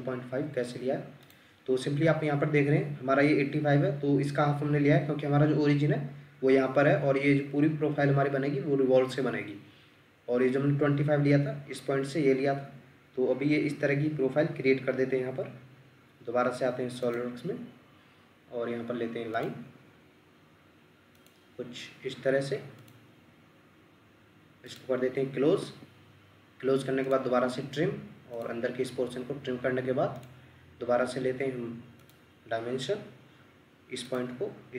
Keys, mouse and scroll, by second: 25.6 Escape.